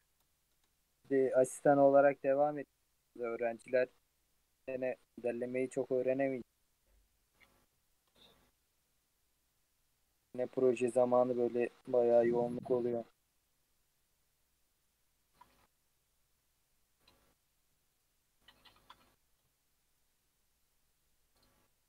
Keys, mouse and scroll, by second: 1.9 click, 2.5 shift+middle click, 3.1-4.2 scroll up 2, 4.2 alt+click, 5.4 g, 7.9 shift+click, 8.3 g, 10.4-11.0 shift+middle drag, 11.0 alt+click, 11.3 g, 12.5 shift+click, 12.9 g, 18.7 shift+click, 19.9 shift+click, 20.7 shift+click, 21.6 shift+click.